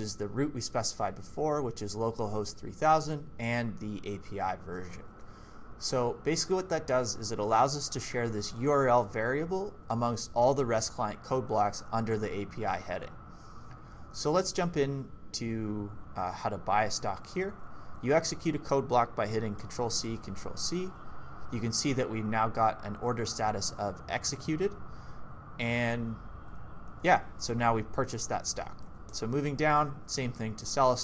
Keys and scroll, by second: 14.0-17.3 typing, 19.6 ctrl+c, 26.3 k, 26.9 j, 27.1 j, 27.4 j, 28.8 ctrl+d.